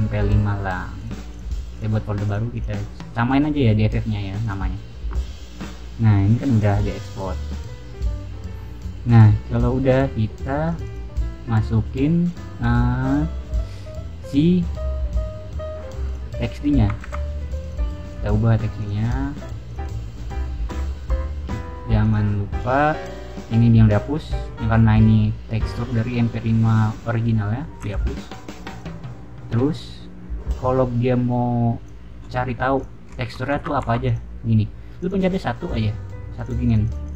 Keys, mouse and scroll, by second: 0.9 click, 1.2 click, 1.7 click, 2.2 click, 2.5 click, 4.3 click, 6.5 click, 9.5 click, 10.6 click, 16.0 click, 17.0 ctrl+c, 17.4 click, 17.5 click, 18.0 right click, 18.7 click, 19.0 click, 19.6 click, 19.7 click, 21.9 click, 22.5 click, 28.3 click, 28.6 click, 31.7 click, 32.4 middle drag, 32.7 click, 33.3 middle click, 33.5 Tab, 33.7 3, 34.0 click, 34.9 click, 36.3 click, 36.6 click, 36.8 click, 37.0 click.